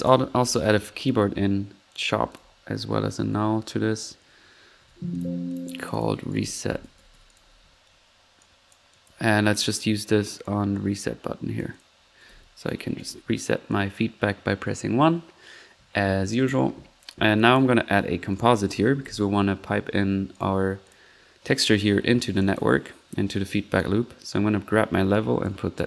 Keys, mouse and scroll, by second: 0.1-0.9 typing, 1.0-1.4 drag, 1.9 click, 2.3 click, 2.9-3.6 typing, 4.7 typing, 12.2-12.9 typing, 18.6-19.0 typing.